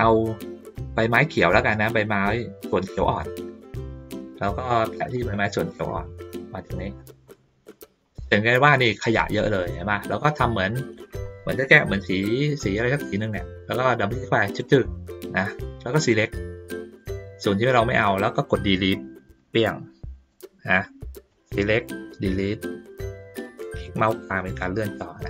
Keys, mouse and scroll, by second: 2.9 ctrl+middle click, 3.7 middle click, 4.0 middle click, 5.1 click, 5.8-7.0 drag, 7.3 middle click, 8.0 ctrl+middle click, 8.4 ctrl+middle click, 10.0 ctrl+middle click, 11.5 middle click, 14.5 click, 14.6 click, 15.9-16.9 drag, 20.3 middle click, 21.3 click, 23.6-24.8 middle drag.